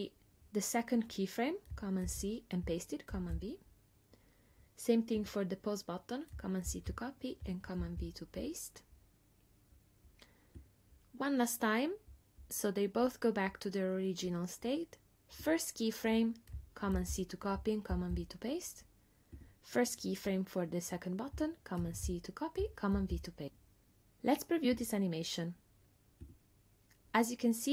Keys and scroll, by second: 2.1 super+c, 3.1 super+v, 6.7 super+c, 7.8 super+v, 17.0 super+c, 17.9 super+v, 21.8 super+c, 23.0 super+v.